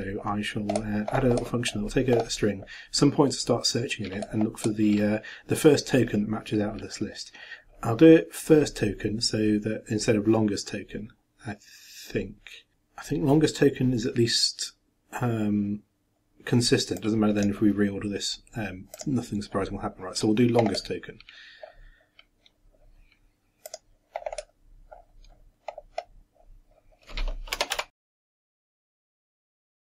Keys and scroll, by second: 28.4-29.9 typing.